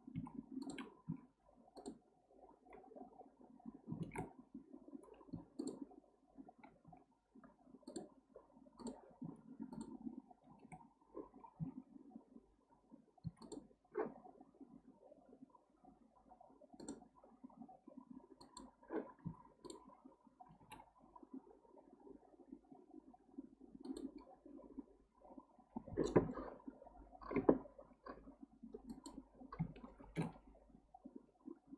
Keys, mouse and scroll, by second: 0.1 1, 0.6 drag, 1.1 x, 4.0 ctrl+z, 4.7-5.3 scroll up 2, 5.3 2, 5.6 click, 6.8 x, 8.8 drag, 9.2 x, 13.4 click, 16.8-19.2 drag, 19.2 1, 19.6 click, 20.6 g, 26.5-28.4 scroll down 2, 28.4-28.9 scroll up 1, 28.9 click, 30.0 ctrl+shift+b.